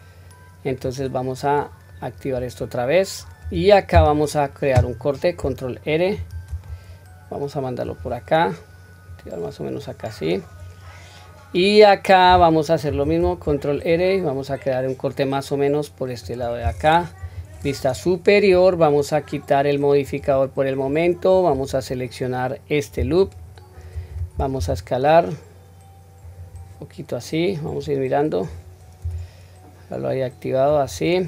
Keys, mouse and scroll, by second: 0.7 click, 1.9-3.3 middle drag, 9.1 click, 9.8-10.4 middle drag, 12.9 ctrl+r, 17.2 KP_7, 18.0-18.4 scroll up 1, 20.0 click, 20.0 scroll up 1, 21.0 scroll down 1, 23.2 alt+click, 24.6 s, 27.7 click, 29.0 s.